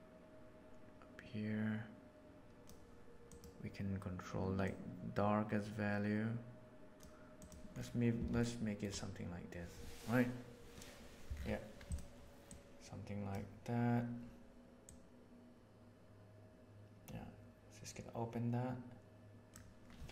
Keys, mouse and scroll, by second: 2.5 click, 3.2 click, 8.5 shift+middle click, 12.4 click, 14.8-19.5 drag.